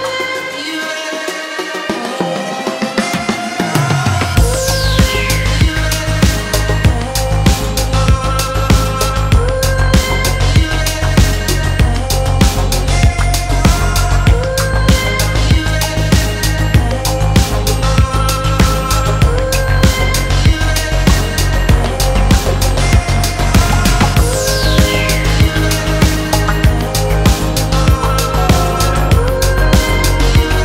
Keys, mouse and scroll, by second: 2.5-3.1 scroll down 1, 3.1-3.7 scroll down 1, 3.7-8.0 drag, 8.8 drag, 10.0 click, 10.5-12.6 drag, 13.2-15.2 drag, 15.9-22.1 drag, 22.3-23.2 scroll down 2, 23.2 click, 24.4-25.2 scroll down 3, 25.2 click, 25.6-26.3 scroll down 2, 27.1 click, 28.5-30.6 drag.